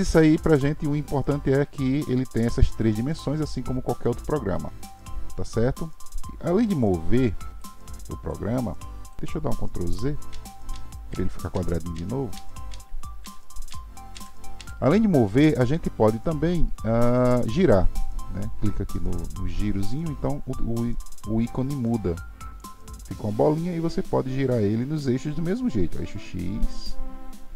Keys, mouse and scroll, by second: 6.0 middle drag, 6.7 click, 8.2 click, 10.3 ctrl+z, 10.7 ctrl+z, 11.1 ctrl+z, 11.5 ctrl+z, 12.0 ctrl+z, 12.3 ctrl+z, 12.7 ctrl+z, 13.2 ctrl+z, 14.1 ctrl+z, 14.6 ctrl+z, 17.6 click, 23.3 click, 25.5 click.